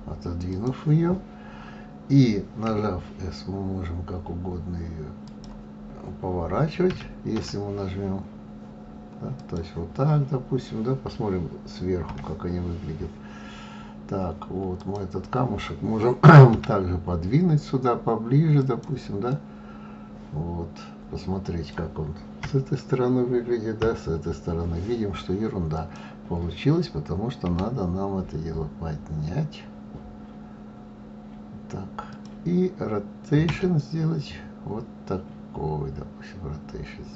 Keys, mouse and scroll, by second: 2.7 s, 6.9 e, 7.4 r, 12.1 KP_7, 13.5-14.1 scroll down 3, 14.8 click, 16.5 g, 19.3-22.4 middle drag, 22.4 KP_1, 23.8 KP_3, 25.8 click, 27.5 g, 33.5 r.